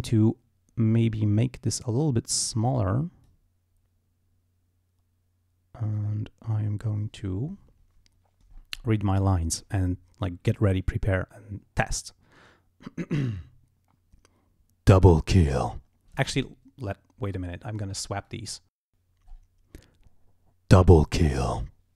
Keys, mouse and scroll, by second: 1.5-2.7 drag, 3.2 click, 5.9-7.0 drag, 8.5-9.0 scroll up 2, 17.5 click, 18.3 click, 18.9 click, 19.3 scroll up 2.